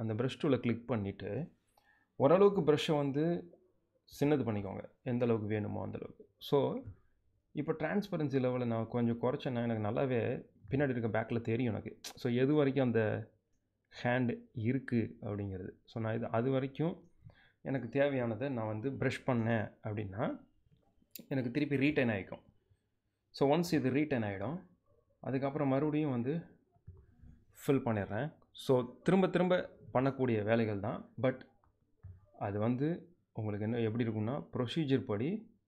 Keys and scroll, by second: 2.1 alt+[, 3.9 [, 23.1 space.